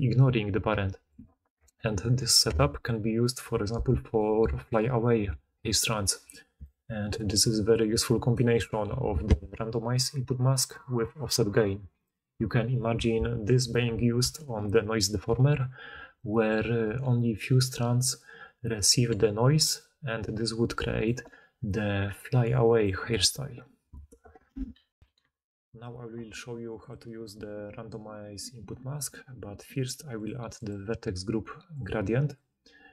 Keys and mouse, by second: 1.1 d, 1.2 d, 3.4 d, 4.2 d, 6.5 d, 7.2-19.4 drag, 7.2-19.4 middle drag, 7.2-19.4 right drag, 8.3 d, 8.4 d, 19.4-23.0 d, 23.3 d, 25.0 ctrl+alt+Insert.